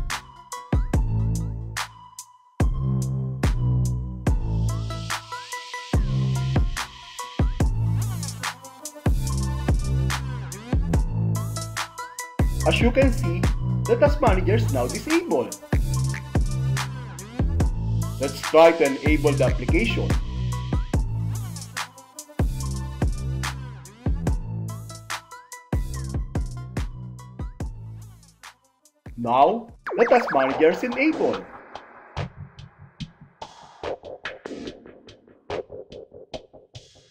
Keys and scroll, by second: 1.8 alt+e, 3.7 alt+a, 5.9 super+r, 10.8 Return, 16.1 Return, 20.3 alt+d, 22.5 alt+a, 24.7 super+r, 26.1 Return, 31.6 Escape, 33.6 alt+c, 35.6 alt+a.